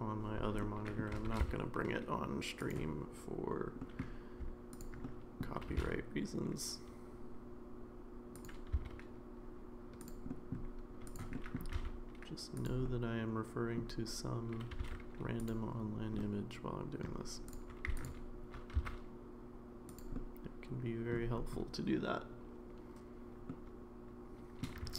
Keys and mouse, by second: 0.6 shift+middle click, 1.3 g, 3.8 middle click, 5.0 middle click, 5.7 g, 8.7 s, 10.3 middle click, 11.1 click, 11.3 middle click, 11.7 g, 12.8 middle click, 16.2 middle click, 17.5 click, 18.0 alt+click, 18.7 s, 20.1-21.1 middle drag, 23.5-24.6 middle drag.